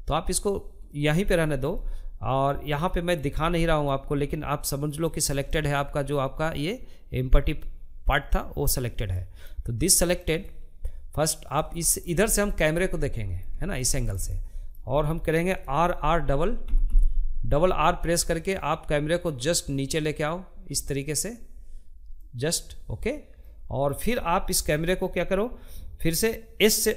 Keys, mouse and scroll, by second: 1.7 scroll up 2, 2.0-3.6 shift+middle drag, 3.6 scroll up 2, 3.9-6.9 shift+middle drag, 7.5-10.6 middle drag, 10.6-11.0 scroll down 3, 11.0-15.1 shift+middle drag, 15.1 r, 21.8-26.9 middle drag.